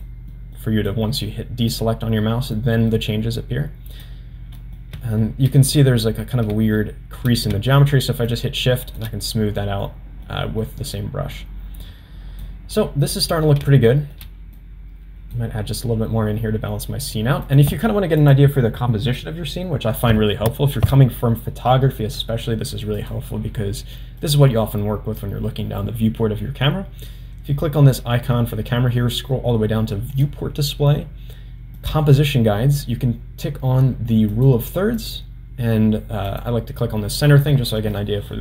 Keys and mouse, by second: 0.3 middle click, 0.9 click, 2.6 middle click, 3.4 click, 4.6 middle click, 5.7 middle click, 6.8 shift+middle click, 8.3 shift+click, 9.8 middle click, 10.6 middle click, 11.3 click, 13.1 middle click, 13.9 shift+middle click, 14.6 click, 17.5 click, 23.0 click, 24.2 click, 30.1 click, 31.8 click, 34.4 click, 35.0 click, 36.3 click.